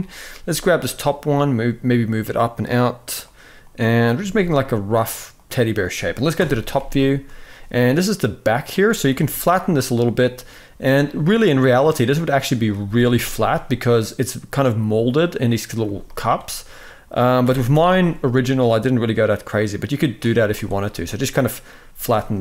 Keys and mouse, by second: 0.2 g, 3.9 g, 6.1 KP_7, 6.8 shift+middle click, 7.2-8.4 drag, 8.8 g, 12.0 click, 12.6 s, 15.5 z, 16.2 click, 17.1 s, 20.1 z, 20.7 middle click, 22.3 KP_1.